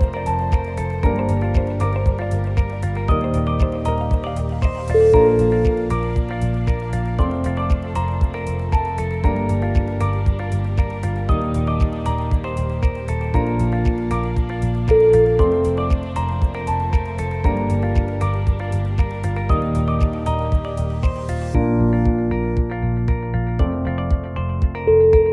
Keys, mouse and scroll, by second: 3.6-5.5 shift+click, 6.7 shift+middle click, 7.1 g, 7.7 click, 8.0 click, 8.4 g, 8.6 g, 10.4 ctrl+z, 10.7 click, 11.0 g, 12.3 click, 12.6 g, 14.0 d, 14.0 alt+click, 14.4 g, 16.1 click, 16.5 2, 16.8 click, 17.2 g, 19.1 click, 19.4 g, 21.6 click, 22.0 g, 24.0 click, 24.3 g.